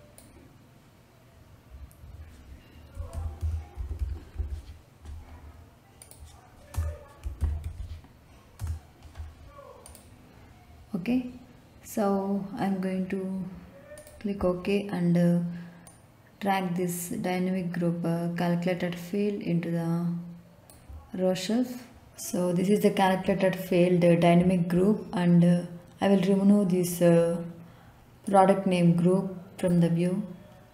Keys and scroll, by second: 2.7-4.8 typing, 6.7 Return, 6.9-8.1 typing, 8.6 Return.